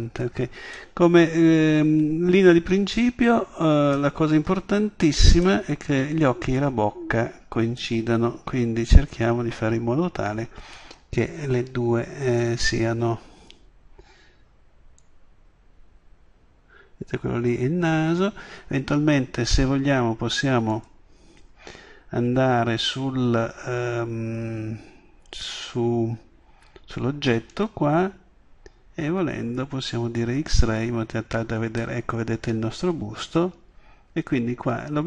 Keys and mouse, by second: 4.3-6.5 middle drag, 8.2-9.1 middle drag, 15.0 click, 20.7-21.4 drag, 32.7-33.1 middle drag.